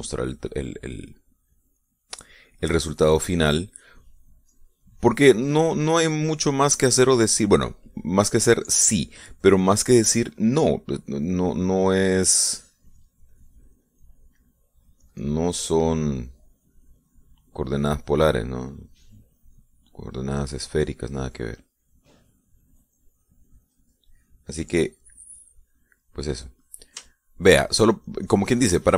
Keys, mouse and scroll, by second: 12.0-15.1 drag, 15.9-26.9 drag, 27.1 middle click, 28.1 shift+middle click.